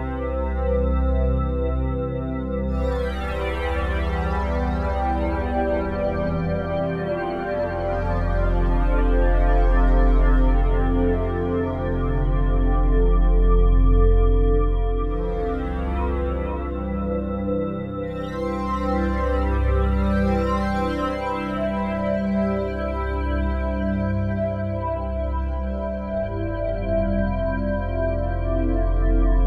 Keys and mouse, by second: 0.0-0.2 typing, 1.4-4.4 drag, 4.4 typing, 5.2-6.7 alt+shift+drag, 6.8 click, 7.1-7.8 drag, 7.8 ctrl+s, 8.1 alt+a, 8.9 alt+click, 9.7 ctrl+alt+shift+click, 10.2-12.0 alt+shift+drag, 13.8-14.5 ctrl+alt+drag, 14.8-15.3 alt+shift+drag, 15.5-16.0 ctrl+alt+drag, 16.5-22.9 alt+drag, 23.2 ctrl+alt+click, 23.7 ctrl+alt+shift+click, 24.8-25.3 alt+shift+drag, 25.3-26.2 drag, 26.7-28.0 drag, 28.1-28.8 drag, 28.9-29.3 drag.